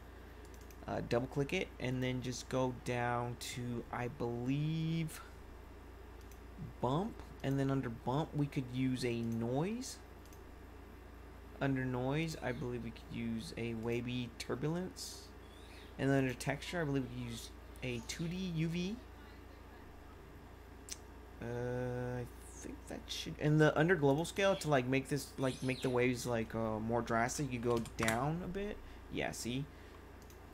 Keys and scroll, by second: 27.6 5, 27.9 Return.